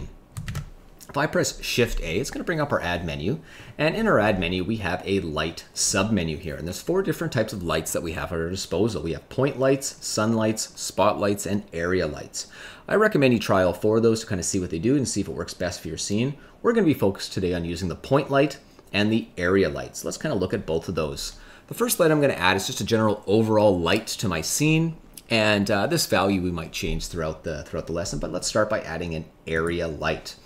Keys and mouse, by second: 0.4 shift+a.